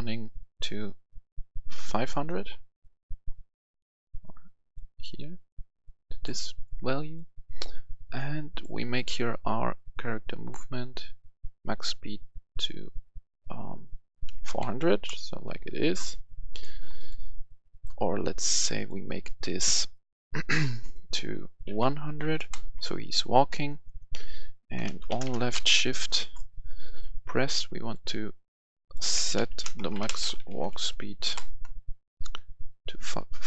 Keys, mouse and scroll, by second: 14.3 typing, 14.8 Return, 16.3 Return, 16.4 click, 17.4 right click, 18.4 click, 21.6-22.1 typing, 22.5 Return, 23.4 right click, 24.7-25.7 typing, 25.9 Return, 26.7 right click, 27.5 click, 29.1-30.8 typing, 31.2 Return, 32.3-33.4 drag.